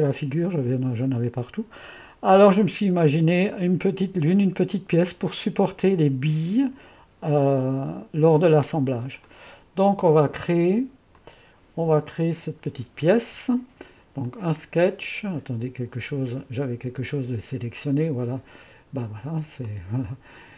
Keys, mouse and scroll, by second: 4.1 click, 6.0 click, 9.3-14.8 drag, 17.0 Escape, 19.7-20.5 drag.